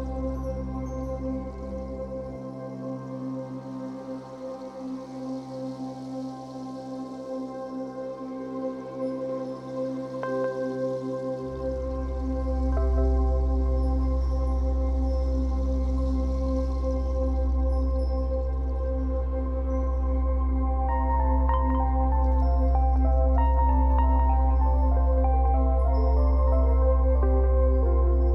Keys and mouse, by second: 0.0-0.7 typing, 1.8 /, 3.3-7.4 drag, 3.8 1, 8.0-9.3 drag, 9.8-12.1 drag, 11.2 typing, 13.3 click, 14.6 g, 15.2 3, 15.4-22.0 drag, 18.3 typing, 21.1-22.0 typing, 22.4-23.9 drag, 24.3 h, 25.1 click, 25.5 space, 26.8 space, 28.1-28.3 drag, 28.1 typing.